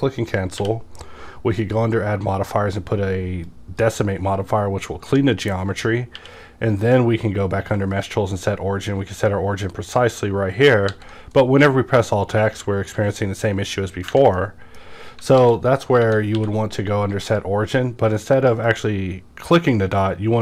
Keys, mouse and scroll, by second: 0.6 q, 3.4-7.9 drag, 7.1 q, 9.9 click, 10.9 alt+x, 11.4-16.3 middle drag, 15.4 alt+x, 16.3 q, 17.3 click, 18.6-20.4 drag.